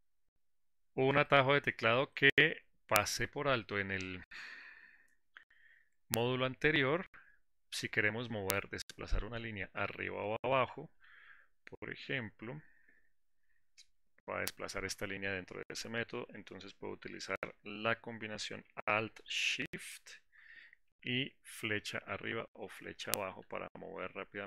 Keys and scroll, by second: 21.3 alt+shift+Down, 23.8 alt+shift+Up.